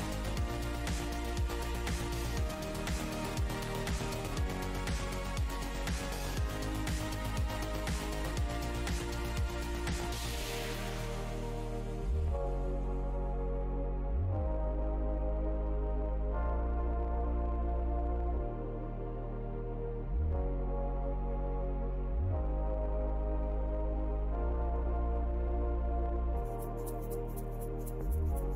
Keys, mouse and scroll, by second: 0.4 alt+click, 2.1 alt+click, 2.3 alt+scroll up 1, 3.9 alt+scroll up 1, 4.8 click, 5.2 alt+w, 5.2 scroll up 1, 7.3 click, 7.8 alt+scroll down 1, 8.4 alt+click, 8.6-9.2 alt+scroll down 1, 9.5 alt+scroll, 9.7 scroll down 1, 13.6 alt+click, 15.7 shift+click, 17.0-17.6 alt+scroll up 2, 19.8 alt+scroll, 22.4 alt+scroll down 1, 22.7 alt+scroll up 1, 24.6 right click, 24.9 click, 25.3 w, 28.3 ctrl+click.